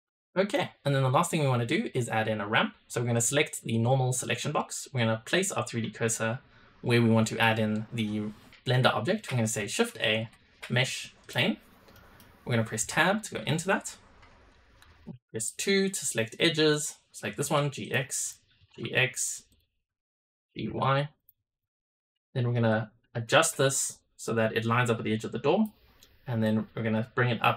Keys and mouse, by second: 0.1 middle click, 3.1 click, 4.3 drag, 4.7-5.4 shift+middle drag, 9.8 shift+a, 11.8 click, 12.7 Tab, 15.5 2, 16.6 click, 17.2 g, 18.1 click, 18.5 g, 19.4-20.5 drag, 20.5 g, 22.2 shift+middle click, 22.6 middle click, 24.2-25.5 drag, 26.4-27.5 drag.